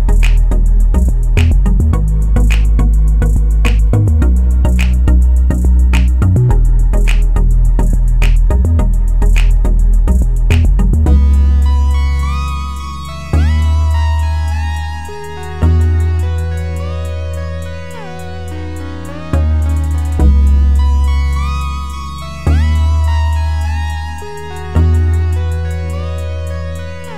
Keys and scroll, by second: 15.1 ctrl+j.